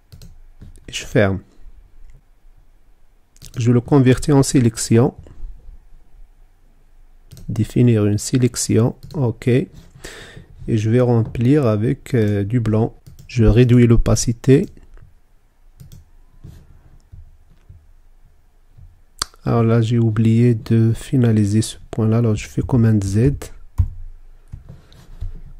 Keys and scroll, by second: 21.9 super+z.